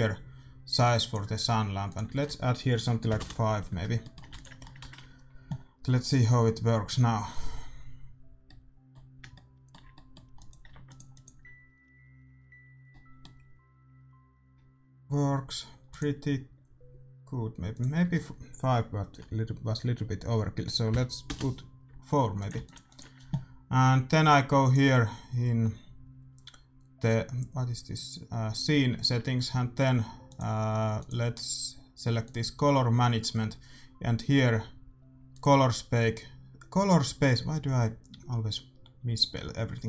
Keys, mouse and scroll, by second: 1.8-3.6 drag, 3.9-7.0 middle drag, 4.2 ctrl+s, 6.1 shift+z, 8.5-10.4 middle drag, 10.4-13.0 drag, 10.7 ctrl+s, 13.0-14.6 middle drag, 16.1-17.6 drag, 19.3 click, 22.5 ctrl+s, 22.5-30.1 drag, 30.2-34.1 drag, 32.9-35.2 middle drag, 35.2-37.1 drag.